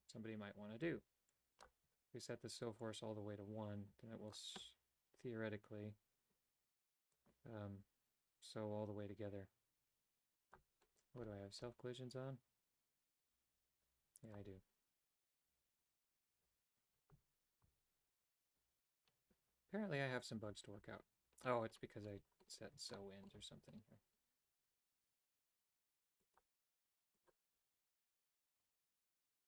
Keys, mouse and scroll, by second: 2.8-4.4 drag, 7.2-10.6 drag, 14.3 click, 17.3 Tab, 17.7 Tab, 23.0 shift+middle click, 26.2 click, 27.2 click.